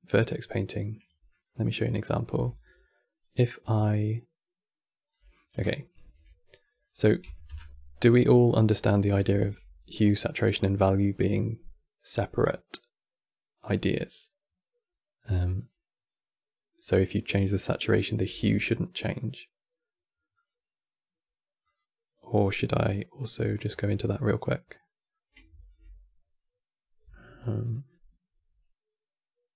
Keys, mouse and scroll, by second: 1.0-2.0 middle drag, 2.0 n, 4.8 click, 5.0 middle click, 5.3-5.7 scroll up 6, 5.8 n, 6.3 middle click, 6.9 KP_Decimal, 7.2 KP_7, 7.9-8.9 scroll up 2, 9.0 shift+a, 22.6 middle click, 23.1-23.5 scroll up 2, 23.6 middle click, 24.1 scroll up 1, 24.5-25.2 middle drag, 25.2 shift+a, 26.7 q.